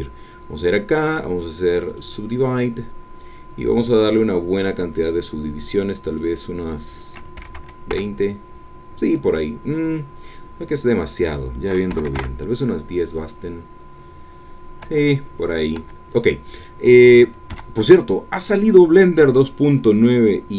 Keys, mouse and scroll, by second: 1.0 right click, 1.8 click, 4.9 click, 6.1-7.3 drag, 7.5 KP_0, 7.9 KP_Enter, 11.0 click, 11.9 KP_1, 12.1 KP_0, 12.2 KP_Enter, 14.9 Tab, 15.8 Tab, 17.5 2.